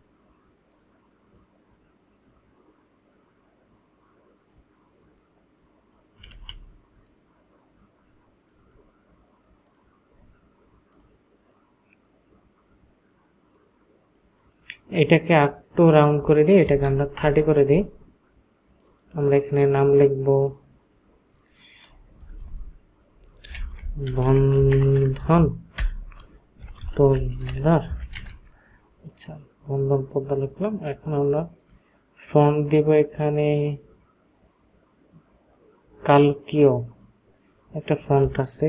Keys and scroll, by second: 6.3 ctrl+z, 7.0 ctrl+shift+z, 16.8 KP_0, 17.2 Return, 22.4 BackSpace, 23.5-28.1 typing.